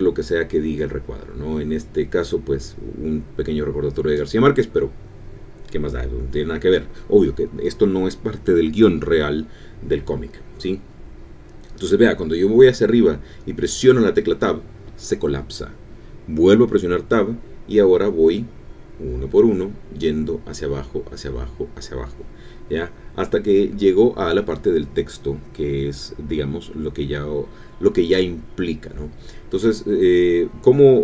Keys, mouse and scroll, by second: 0.0-2.4 typing, 5.2 shift+2, 8.4 ctrl+Home, 13.8 Tab, 16.6 Tab, 17.9 Down, 18.1 Tab, 18.6 Down, 18.7 Tab, 19.0 Down, 19.2 Tab, 20.3 Up, 20.7 Down.